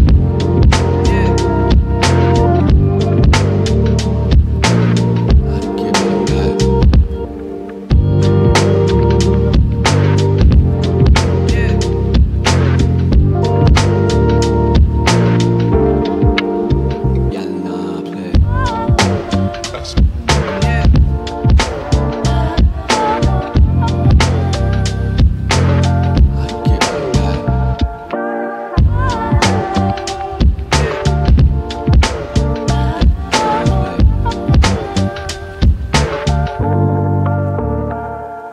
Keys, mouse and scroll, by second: 2.3 scroll up 1, 3.4 click, 4.4-4.8 scroll down 1, 4.8 right click, 5.7 scroll down 1, 6.5-6.9 scroll up 1, 7.3 click, 8.6 right click, 10.0 ctrl+click, 12.7 click, 13.2 right click, 13.9 scroll up 1, 14.3 click, 16.5-17.3 typing, 21.9 click, 22.3 right click, 23.1 click, 23.6 shift+click, 26.4-26.8 scroll down 1, 26.8 middle click, 27.8 scroll up 1, 29.2 click, 31.9 right click, 32.6 click, 33.7 right click, 35.4 click, 35.4 click, 36.4 right click, 38.0 click.